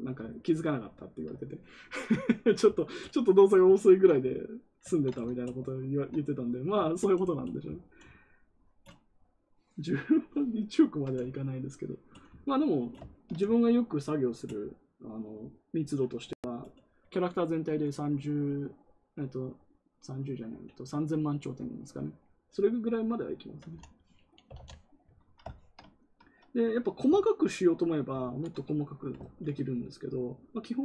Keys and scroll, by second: 24.1-25.0 typing, 27.0 ctrl+z, 28.1 ctrl+z.